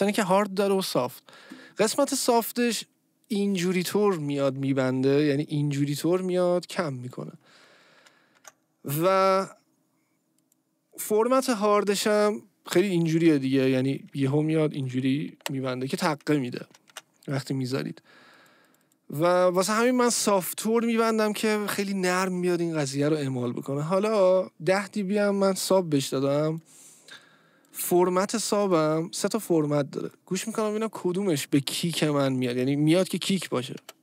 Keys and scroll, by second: 7.7 ctrl+z, 16.6 ctrl+z, 33.8 space.